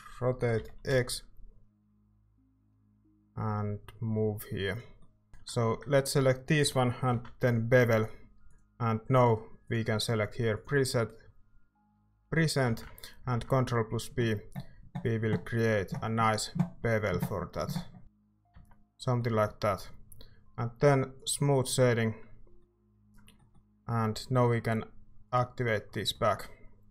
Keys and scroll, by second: 0.6 r, 0.9 x, 2.9-3.6 typing, 7.1 ctrl+b, 12.7 ctrl+z, 13.2 ctrl+b, 18.5 Tab.